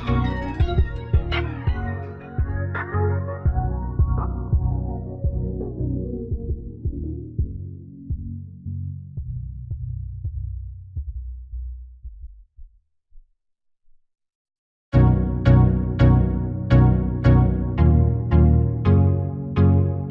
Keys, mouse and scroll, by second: 1.2-2.4 drag, 3.1 click, 4.4 r, 4.8 a, 5.0 r, 6.0 s, 7.8 click, 8.8 right click, 9.6-10.6 drag, 11.1 a, 11.2 s, 14.0 right click, 16.9 middle click, 17.1-19.2 right drag, 17.7 middle click, 19.2 click, 19.8-20.1 middle drag.